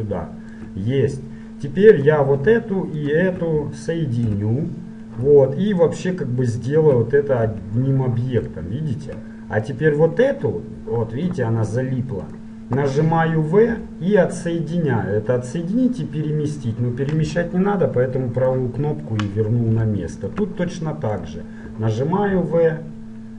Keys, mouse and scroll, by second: 0.2-2.0 middle drag, 2.0-8.7 right drag, 4.3 f, 7.6 f, 8.7 middle click, 9.8 right click, 10.6 click, 11.4 right click, 13.7 v, 19.8-21.2 middle drag, 21.2-23.0 right drag.